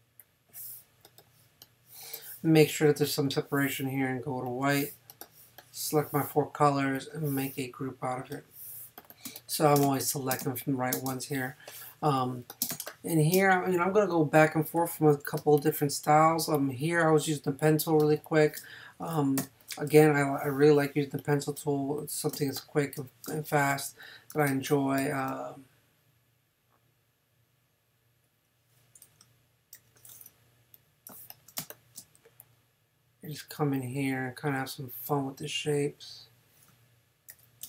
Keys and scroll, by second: 9.3 space, 12.7 space, 15.4 space, 18.0 space, 19.4 n, 21.0 space, 22.3 space, 29.7 super+j, 31.6 super+space, 32.6 space, 37.3 super+j.